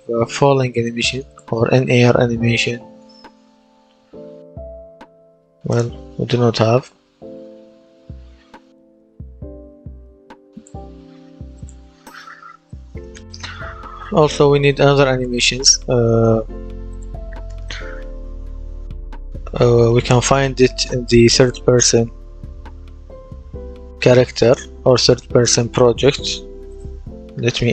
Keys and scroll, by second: 0.0-0.1 typing, 2.1-3.3 typing, 4.4 BackSpace, 5.3 n, 5.6 space, 6.2 a, 7.7 i, 9.0 r.